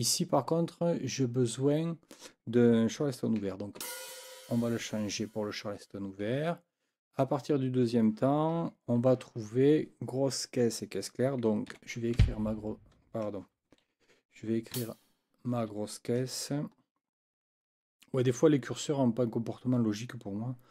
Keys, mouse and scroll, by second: 3.8 e, 11.7 KP_4, 12.2 b, 13.7 ctrl+z, 14.7 Right.